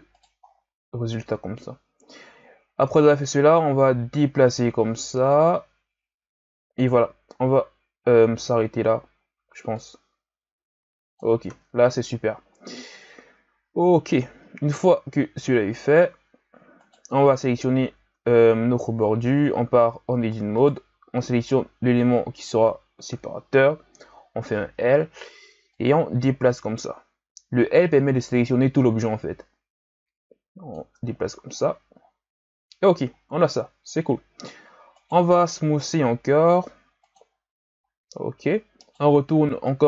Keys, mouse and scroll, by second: 0.5-1.1 scroll down 4, 1.1-3.2 scroll up 2, 3.2-6.3 drag, 7.4 z, 8.1-8.6 scroll down 3, 8.6-9.8 scroll up 3, 9.8-11.5 drag, 11.5 Tab, 12.5-12.9 scroll down 4, 12.9-14.1 scroll up 7, 14.4 z, 14.8-16.2 scroll up 5, 16.2 z, 16.8 right click, 17.6-18.1 scroll down 2, 18.1 Tab, 19.1-20.6 scroll up 2, 20.6 right click, 24.0 l, 25.7-28.8 drag, 30.9 Tab, 31.2 a, 31.5-32.2 scroll down 10, 33.0-33.9 scroll up 8, 34.6-35.0 scroll down 2, 35.0 right click, 35.9 w, 38.1-38.8 scroll up 3, 38.8 right click, 39.3 Tab.